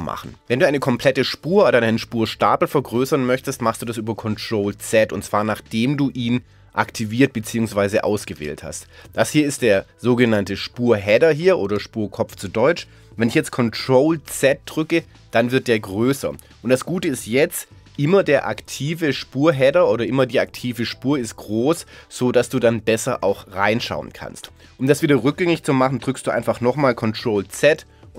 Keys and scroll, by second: 14.3 ctrl+z, 18.1 Down, 27.5 ctrl+z.